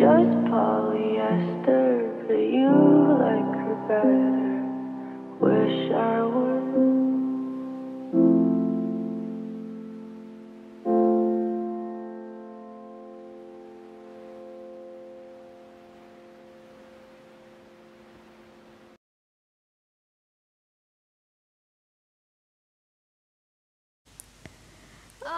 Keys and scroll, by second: 11.9 shift+d, 12.6 Delete, 19.4 s.